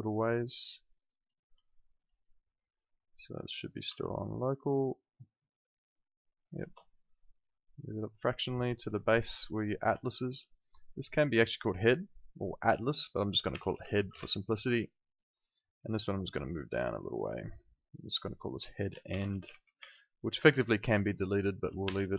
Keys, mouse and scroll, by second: 1.6 alt+middle click, 4.2 ctrl+shift+right click, 7.4 click, 9.0 alt+middle click, 10.0 alt+middle click, 10.9 click, 13.3-14.4 typing, 15.8 click, 18.8-22.1 typing.